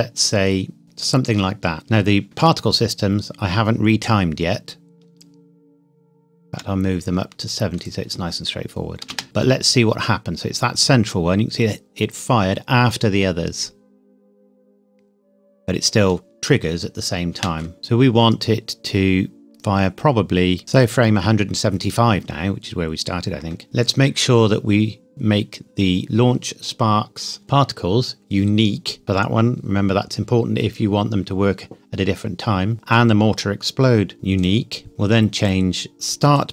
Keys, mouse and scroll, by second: 1.0 click, 1.8-2.2 scroll up 1, 2.2 shift+middle click, 2.5-4.4 scroll up 1, 7.8 click, 9.1 space, 12.1 scroll down 1, 17.3 space, 17.8 click, 23.6 Escape, 27.4 click, 29.0 click, 32.7 click, 34.4 click, 35.4 click, 36.4 click.